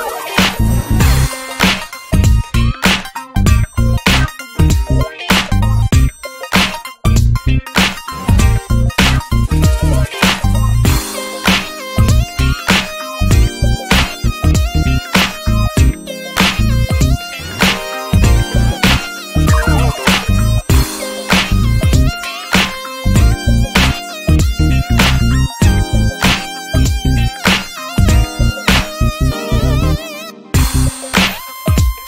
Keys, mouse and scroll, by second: 1.5 scroll down 1, 1.6 shift+middle click, 2.1 e, 2.8-4.3 drag, 4.3 scroll down 1, 4.7 scroll up 2, 4.9 shift+middle click, 5.7 click, 6.1-6.6 shift+middle drag, 6.6 e, 7.9-9.1 drag, 9.1-9.6 shift+middle drag, 9.6 e, 10.9-11.3 scroll down 6, 11.3 alt+z, 11.5 Tab, 11.6 Tab, 12.0 alt+z, 12.2 scroll up 1, 12.4 shift+middle click, 12.8 e, 13.6 drag, 15.6 scroll down 11, 15.8 alt+z, 16.0 Tab, 16.1 drag, 16.3-16.8 shift+middle drag, 16.8-17.5 scroll up 4, 16.9 Tab, 17.2 alt+z, 17.6 shift+middle click, 17.9 ctrl+s, 18.0 click, 18.4 shift+middle click, 18.5-19.3 scroll up 4, 18.7 ctrl+s, 19.0 shift+middle click, 19.3-19.8 scroll down 3, 19.8 click, 20.5 scroll up 1, 20.7 ctrl+s, 21.0 shift+middle click, 21.2-21.6 scroll up 2, 21.3 shift+middle click, 21.9 e, 23.3 e, 25.6 scroll down 2, 25.8-26.1 shift+middle drag, 26.1 e, 26.7 click, 27.8 scroll down 1, 28.0-29.3 shift+middle drag, 29.3 e, 30.0 click, 30.6 e, 31.1 drag.